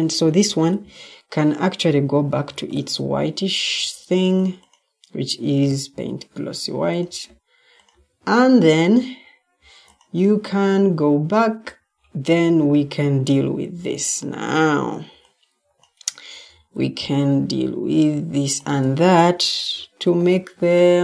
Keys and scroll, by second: 0.3 Escape, 2.4 ctrl+t, 5.6 p, 13.6 Escape, 14.8-15.3 typing, 16.4 Escape, 19.9 ctrl+t.